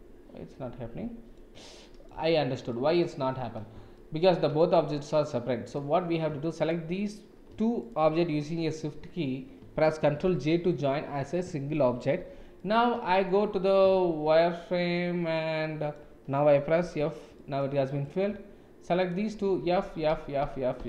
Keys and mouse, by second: 1.8 middle click, 2.1 Tab, 2.8 middle click, 3.9-4.3 shift+middle drag, 4.7 click, 5.6 click, 8.3-8.9 middle drag, 10.3 ctrl+j, 12.1 Tab, 12.5-13.7 middle drag, 13.9 shift+z, 14.9 middle click, 15.6 middle click, 16.8 f, 17.3 click, 19.5-20.8 typing.